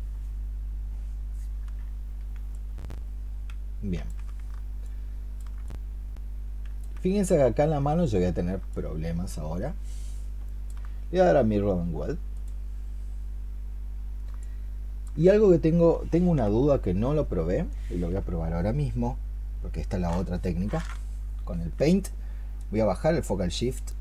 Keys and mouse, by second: 4.7 alt+click, 8.6 alt+click, 14.2 alt+click.